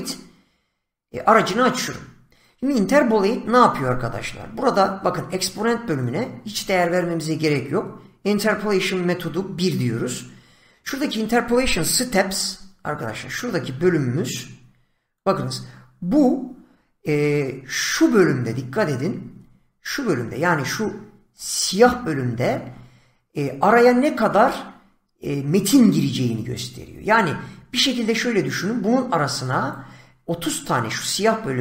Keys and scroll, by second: 12.2 <.